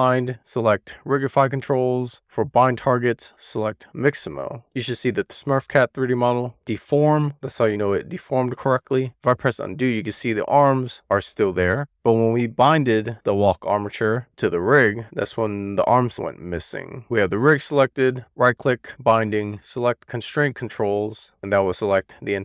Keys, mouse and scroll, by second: 2.0-4.5 drag, 8.4 middle click, 9.2 super+z, 10.5 super+z, 12.7 right click, 13.4 shift+middle click, 14.4 click, 15.6 click, 16.9 click, 18.5-20.9 right drag.